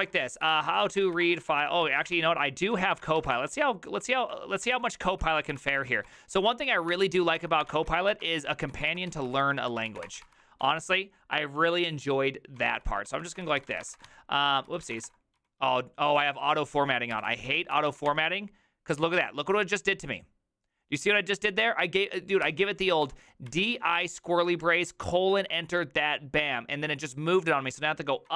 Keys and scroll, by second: 0.0 ctrl+t, 0.2-3.3 typing, 3.1 ctrl+c, 3.2 ctrl+:, 3.3 Return, 4.6-11.1 typing, 5.2 ctrl+c, 12.6-18.6 typing, 14.5 ctrl+c, 15.0 Return, 16.1 ctrl+c, 22.0-25.3 typing, 22.4 ctrl+c, 25.8 Return, 27.6-28.3 typing.